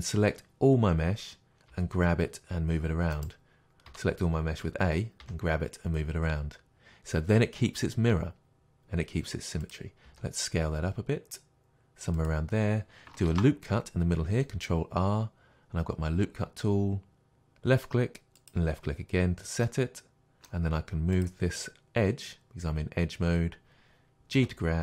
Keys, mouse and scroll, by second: 1.7 g, 3.3 right click, 3.9 a, 5.2 g, 9.7 click, 10.1 s, 12.3 click, 13.3 ctrl+r, 18.5 click, 19.7-21.2 middle drag, 21.2-24.4 drag, 24.4 g.